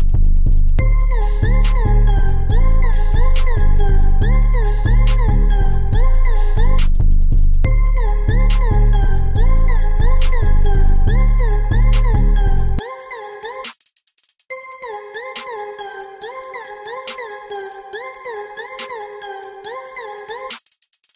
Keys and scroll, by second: 5.7 ctrl+e, 5.9 ctrl+e, 6.2 ctrl+e, 6.5 ctrl+e, 14.0 ctrl+z, 16.6 ctrl+e, 17.9 ctrl+z, 18.3 ctrl+z.